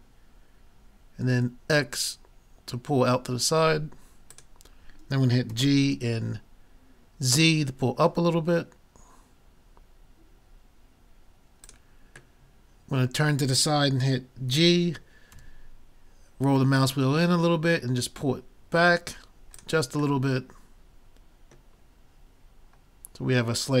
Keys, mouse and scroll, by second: 5.5 g, 11.1 middle click, 12.1-13.9 middle drag, 14.5 g, 19.6-21.5 drag, 20.3-21.5 middle drag.